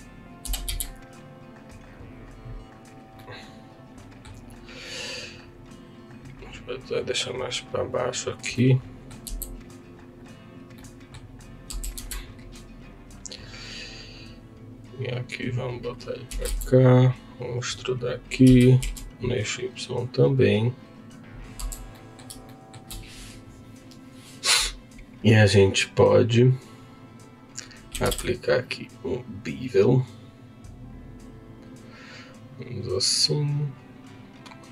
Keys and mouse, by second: 0.0 click, 0.4 s, 0.7 x, 1.9-3.2 drag, 3.2-4.3 middle drag, 6.5-7.7 drag, 8.6 middle click, 9.3 s, 10.2 click, 10.8 middle click, 12.3 Tab, 12.3 2, 17.9 click, 17.9 e, 17.9 z, 18.8 e, 18.8 y, 20.8 click, 21.6 Tab, 21.9 middle click, 22.5 shift+middle click, 26.1-32.6 drag, 33.7-34.7 drag.